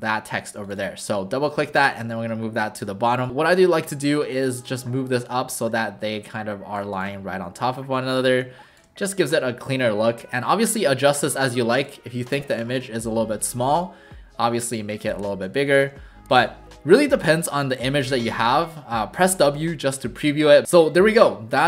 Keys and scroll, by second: 3.9 w, 7.1 shift+w, 12.8 w, 15.3 ctrl+alt+shift+c, 15.9 w.